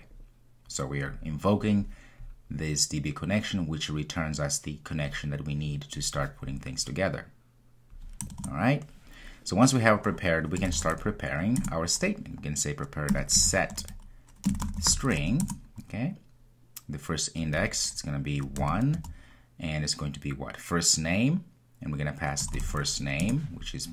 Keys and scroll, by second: 11.6 Return, 23.2 Return.